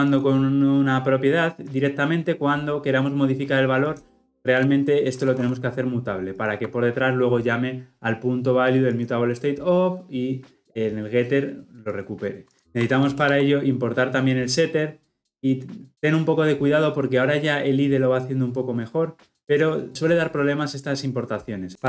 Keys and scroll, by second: 12.6 ctrl+z, 13.2 alt+Return.